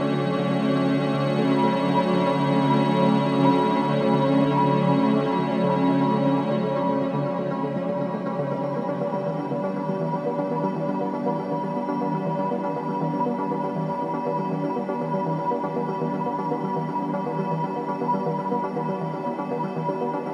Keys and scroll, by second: 3.7 ctrl+j.